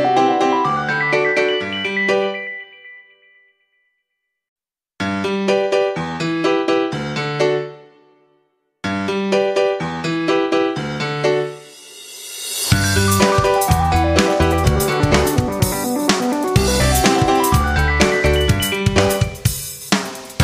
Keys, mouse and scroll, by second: 2.3 right click, 2.7 F9, 2.9 click, 3.9 F9, 4.7 shift+click, 8.8 2, 10.4-10.9 typing, 12.2 Return, 13.4 click, 14.4 2, 16.1-16.8 typing, 16.9 Return, 18.4 click.